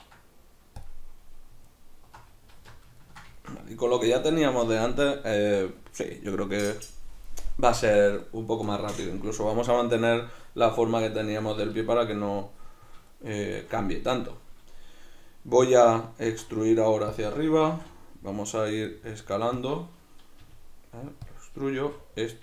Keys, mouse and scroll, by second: 1.7 alt+right click, 2.5 alt+q, 3.0-17.2 ctrl+middle drag, 16.3 e, 17.2 click, 17.6 s, 19.7 click, 20.4 g, 21.4 click, 21.8 s.